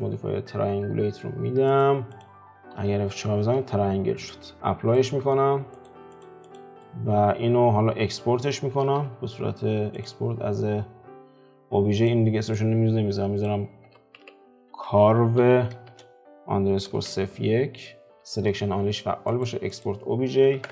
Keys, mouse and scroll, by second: 1.9 click, 2.8 F4, 3.3-4.5 middle drag, 4.5 ctrl+z, 5.9 click, 6.9-10.3 middle drag, 10.3 ctrl+s.